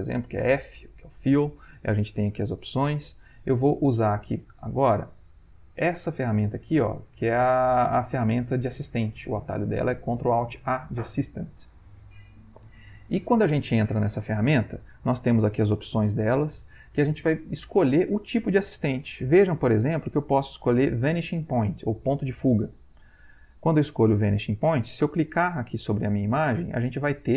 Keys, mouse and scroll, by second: 0.4 f, 5.6 click, 19.2-22.5 drag, 25.9 click.